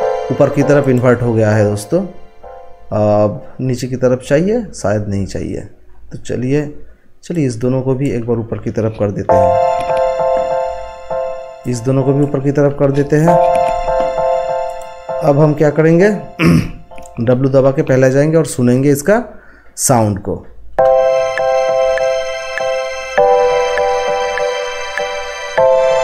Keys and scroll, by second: 9.2 t, 17.4 w.